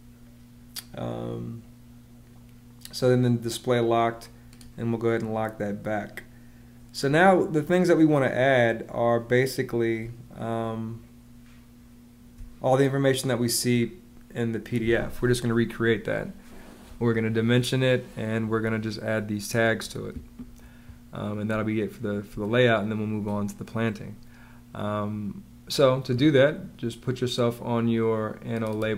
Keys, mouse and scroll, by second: 9.9 space, 21.3 space.